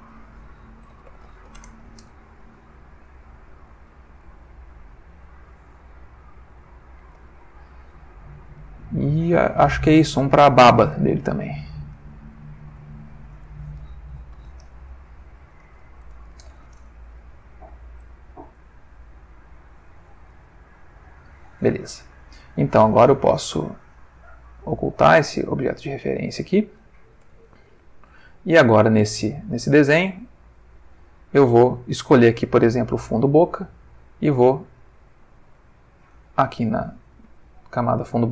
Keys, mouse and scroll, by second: 0.0 click, 0.9-1.4 typing, 1.5 shift+Return, 3.0 click, 3.7 click, 4.2 click, 5.2 click, 6.6 click, 11.8 click, 12.8 click, 13.4 click, 14.3 shift+b, 14.4 shift+a, 15.6 BackSpace, 15.7 b, 15.8 a, 16.0 Return, 17.3 click, 18.0 click, 18.6 click, 19.5 click, 20.8 click, 22.0 ctrl+middle click, 24.3 click, 26.8-27.4 ctrl+middle drag, 27.6-28.3 ctrl+shift+middle drag, 28.4-29.5 ctrl+shift+middle drag, 32.8 click, 34.3 click, 35.3 click, 36.1 click.